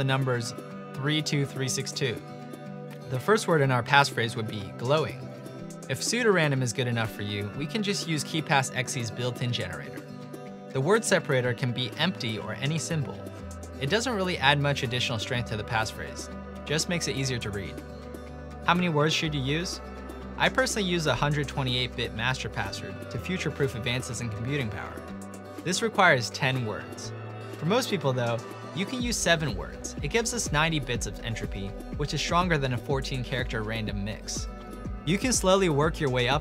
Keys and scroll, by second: 1.1-2.9 typing, 5.5 typing, 11.6-15.0 typing, 16.2 typing, 23.9 typing, 32.6 typing, 35.5 typing.